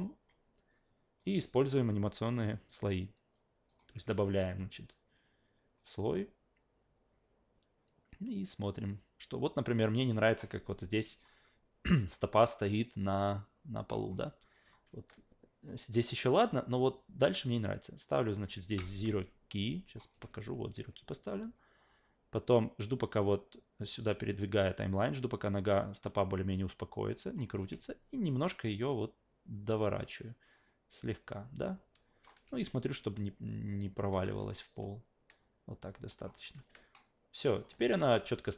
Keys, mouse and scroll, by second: 1.2 click, 2.2 right click, 3.7 click, 4.9-10.4 drag, 10.7 alt+middle click, 11.1 alt+right click, 11.3 alt+middle click, 12.2 alt+middle click, 12.5-13.9 alt+drag, 14.1 alt+middle click, 15.7-18.2 drag, 18.7 s, 19.8 click, 20.1 a, 21.4-27.3 drag, 27.5 e, 28.5 click, 30.0-32.2 alt+drag, 32.3 w, 33.2 click, 34.1 s, 34.4-36.2 alt+drag, 36.8-37.6 alt+drag, 37.8 s.